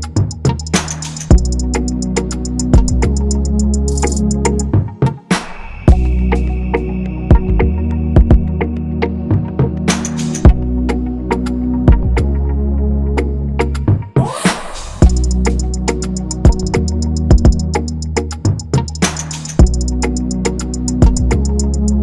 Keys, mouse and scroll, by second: 13.9 shift+click, 18.4 ctrl+=, 18.9 scroll, 19.1 scroll up 1, 19.9 ctrl+=, 20.3 scroll up 1, 21.2-21.7 scroll up 1.